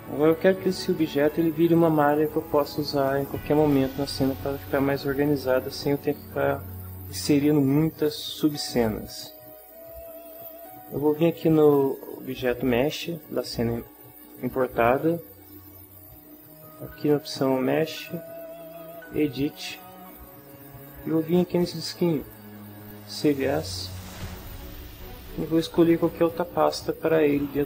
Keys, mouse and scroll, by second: 0.7 shift+middle click, 11.7 click, 17.9 click, 19.3 click, 22.2 click, 23.1 click, 25.8 click.